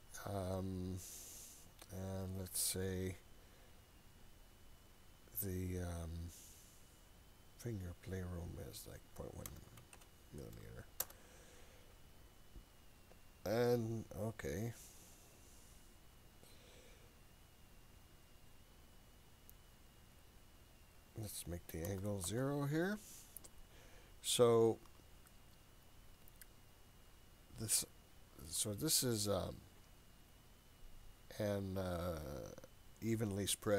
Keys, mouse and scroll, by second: 8.5-12.2 drag, 20.8-23.1 drag, 25.3-28.5 shift+middle drag.